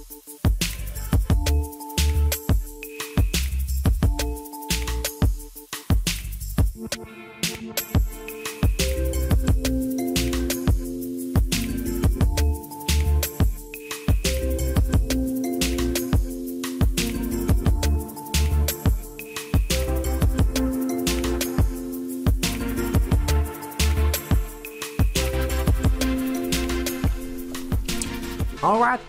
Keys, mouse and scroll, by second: 0.2 scroll down 2, 0.4 shift+middle click, 0.6 click, 0.8 shift+middle click, 1.2 scroll up 2, 1.4 shift+middle click, 1.4 typing, 1.8-2.8 right drag, 2.8 shift+click, 3.0 click, 3.2 right click, 3.4 click, 3.8-4.2 right drag, 4.0 scroll down 2, 4.2 shift+middle click, 4.4 scroll up 2, 4.6 scroll down 2, 4.8 shift+middle click, 4.9 click, 5.1-5.5 scroll up 3, 5.5 shift+middle click, 5.6 scroll down 1, 5.8 click, 5.9 shift+middle click, 6.0 click, 6.2 shift+middle click, 6.4 scroll up 1, 6.5 click, 6.6 shift+click, 6.7-7.0 right drag, 7.0 click, 7.1 right click, 7.3 click, 7.4 shift+click, 7.6 right click, 7.6 click, 7.7 shift+click, 7.7-8.2 right drag, 8.4 right click, 8.5 scroll down 2, 8.6 shift+middle click, 8.8 click, 8.9 scroll up 2, 9.4 click, 9.8 scroll down 2, 10.1 scroll up 2, 10.2 click, 10.5 shift+middle click, 10.9 shift+middle click, 11.0 scroll down 2, 11.1 shift+middle click, 11.2-11.6 scroll up 4, 11.4 click, 11.7 click, 11.8 scroll down 2, 11.8 shift+middle click, 13.3-13.9 scroll up 6, 13.4 shift+middle click, 13.7 shift+middle click, 13.7 click, 14.1 click, 14.1 shift+middle click, 14.3 click, 14.6 shift+click, 14.9 click, 15.0 shift+middle click, 15.2 click, 15.3 scroll down 1, 15.4 shift+middle click, 15.6 KP_Enter, 15.9 click, 16.0 shift+middle click, 16.0-16.5 scroll up 4, 16.2 shift+middle click, 16.4 click, 16.6 click, 16.8-17.4 scroll down 3, 16.9 shift+middle click, 17.5 KP_Enter, 17.8 click, 18.1 shift+middle click, 18.4 scroll up 1, 18.5 shift+middle click, 18.8 click, 19.0 shift+middle click, 19.4 click, 19.7 scroll down 1, 19.7 shift+middle click, 19.9-20.2 scroll up 2, 19.9 shift+middle click, 20.2 click, 20.4 shift+middle click, 20.9 click, 20.9 shift+middle click, 21.2 click, 21.5 shift+middle click, 22.0 click, 22.2 click, 22.4 scroll down 1, 22.4 shift+middle click, 22.5 scroll up 2, 22.8 click, 23.1 shift+middle click, 23.4 click, 23.6 click, 23.8 shift+middle click, 23.8 click, 24.1 shift+middle click, 24.4 click, 24.6 shift+middle click, 24.6 scroll down 2, 25.0 Tab, 25.3 scroll down 2, 25.5 scroll up 1, 25.7-26.0 scroll down 2, 26.1 click.